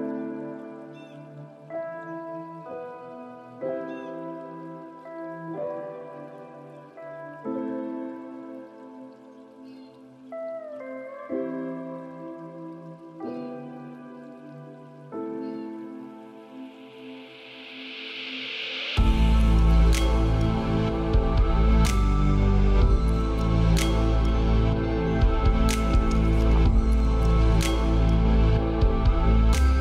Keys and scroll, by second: 6.4 ctrl+d, 13.4 ctrl+space, 17.8 ctrl+space.